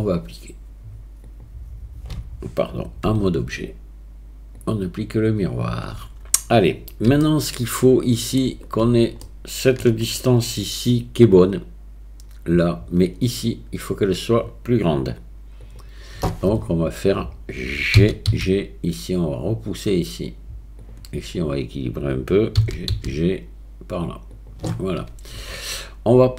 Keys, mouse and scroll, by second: 1.3 click, 3.1 Tab, 4.6-5.4 drag, 5.9 Tab, 7.2-8.4 shift+middle drag, 9.3 shift+click, 18.0 g, 21.5-22.6 drag, 22.6 g.